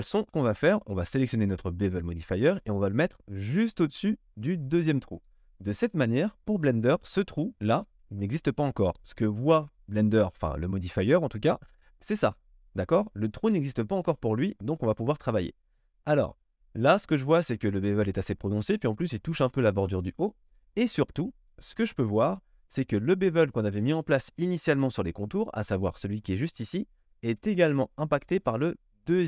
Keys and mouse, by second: 5.4-11.6 middle drag, 11.6 click, 11.7-14.5 middle drag, 14.5 click, 14.6-29.2 middle drag.